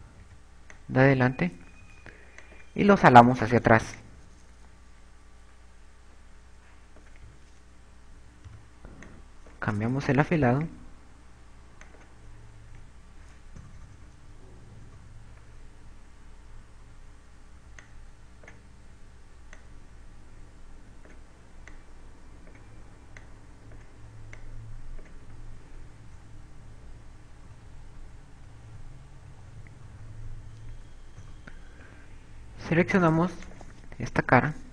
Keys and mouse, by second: 0.7 click, 1.7 b, 3.9 click, 4.9 click, 8.7 a, 9.5 b, 11.9 shift+e, 13.1 click, 14.1 a, 14.5 KP_4, 15.2 KP_4, 15.3 KP_4, 17.1 b, 21.1 click, 23.1 click, 24.7 click, 26.6 a, 27.1 KP_1, 29.5-32.5 typing.